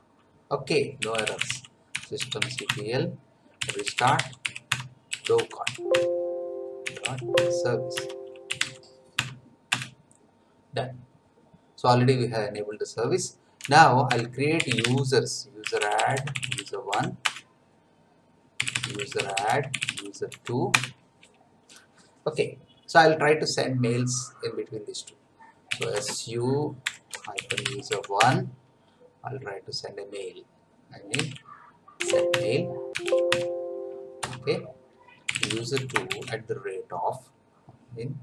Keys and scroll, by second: 0.8-9.1 typing, 8.1 Tab, 9.2 Tab, 9.7 Return, 13.6-20.8 typing, 25.4-28.4 typing, 31.1-36.2 typing, 32.3 Tab.